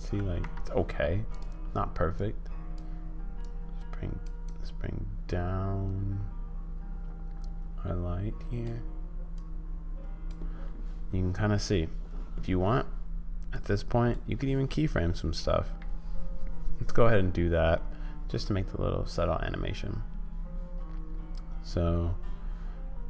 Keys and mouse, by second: 4.4-8.6 drag, 9.3 click, 13.5 click.